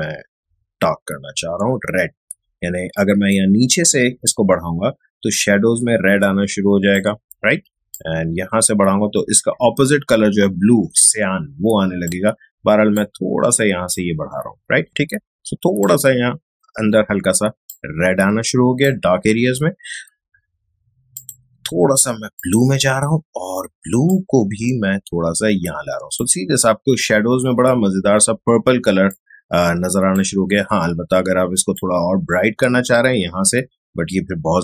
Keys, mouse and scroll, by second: 29.1-34.6 drag.